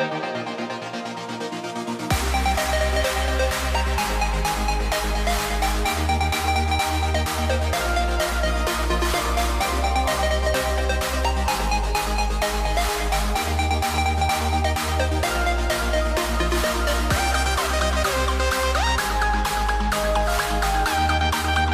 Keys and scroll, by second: 2.3 super+z, 10.2 super+z, 14.6 super+z, 19.8 shift+m.